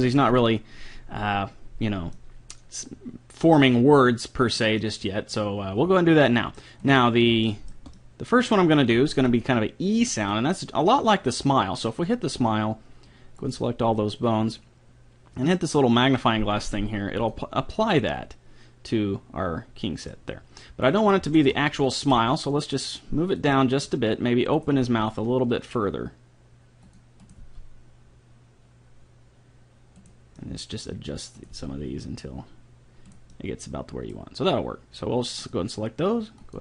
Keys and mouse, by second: 1.3 middle click, 1.8-4.1 middle drag, 4.8 middle click, 6.8-8.0 drag, 6.8-8.0 right drag, 8.0 middle click, 9.2 middle click, 9.9 right click, 10.3 middle click, 12.1-15.1 drag, 17.2-19.1 drag, 17.8-19.5 middle drag, 17.8-19.1 right drag, 20.9-23.1 right drag, 22.2 g, 23.5 middle click, 24.6-26.5 right drag, 24.8 g, 27.3-29.1 right drag, 27.4 g, 31.4 right click, 31.5 g, 32.2 right click, 33.3-34.8 middle drag, 35.4-36.6 drag.